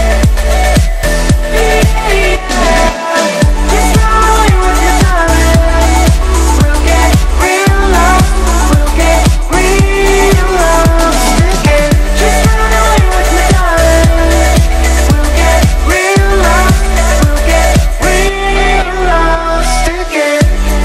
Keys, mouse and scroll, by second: 1.4 Up, 2.5 Return, 3.2 click, 3.4 space, 6.0 click, 6.1-10.0 typing, 10.7 click, 11.1 Down, 12.4 click, 13.3-13.8 shift+click, 15.7 Down, 19.0 Up, 19.4 Down, 20.2 Up.